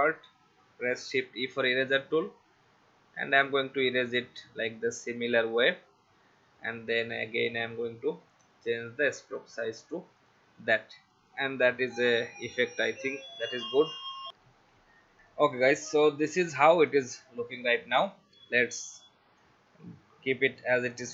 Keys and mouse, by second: 0.2 shift+click, 1.2 shift+e, 3.5 alt+click, 5.6 v, 7.5 click, 13.0 click, 14.3 F10, 15.2 click, 16.9 click, 18.9 click, 20.9 click.